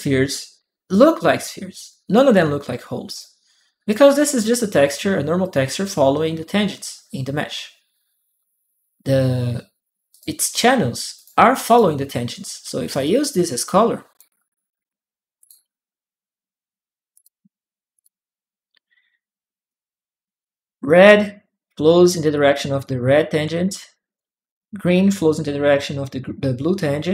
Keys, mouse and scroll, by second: 0.7 click, 1.2-2.9 drag, 1.2 right click, 3.0 right click, 9.9 click, 10.9 click, 11.4 click, 12.8-13.9 drag, 15.2 click, 16.9 click, 17.7 click, 19.5 click, 19.7 right click, 21.8 click, 22.1 right click, 23.3 right click, 23.9 click.